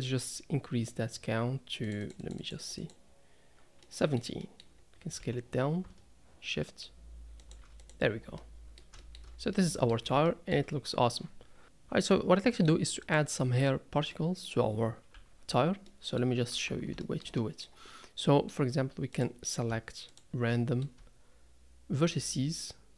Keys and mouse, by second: 1.8 click, 2.0 click, 2.2 click, 2.4 click, 2.6 click, 2.8 click, 3.8-4.2 middle drag, 4.4 middle drag, 5.2 s, 8.4-8.8 middle drag, 9.0 shift+middle click, 9.6-9.9 middle drag, 10.3 shift+middle click, 12.1-12.7 middle drag, 13.0 click, 13.7 Tab, 14.1 middle click, 15.1 Tab, 15.9-16.2 middle drag, 16.5 Tab, 17.0 shift+middle click, 17.4 middle click, 18.2 middle click, 20.5 middle click.